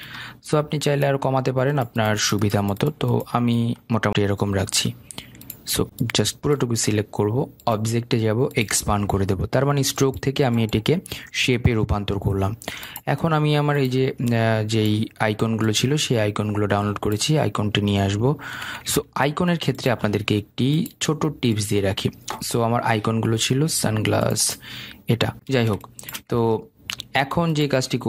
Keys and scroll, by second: 19.4 ctrl+z.